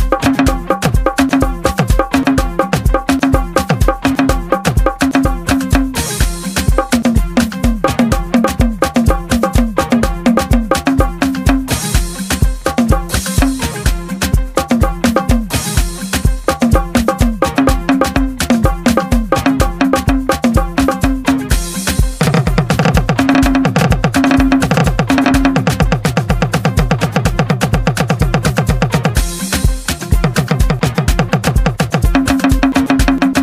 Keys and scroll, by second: 0.0-4.5 typing, 6.9 KP_Divide, 7.5 KP_Divide, 7.8-11.4 typing, 8.6 KP_Divide, 9.6 KP_Divide, 10.2 KP_Divide, 12.6 KP_4, 13.0 KP_9, 13.4 KP_6, 14.8 KP_4, 16.5 KP_Divide, 16.9 KP_Divide, 17.6-19.8 typing, 18.8 KP_Divide, 20.4 KP_Divide, 21.0 KP_6, 22.2-29.1 typing, 30.3 KP_Decimal, 30.9 KP_Decimal, 31.1 KP_2, 31.7 KP_2, 33.3 KP_5.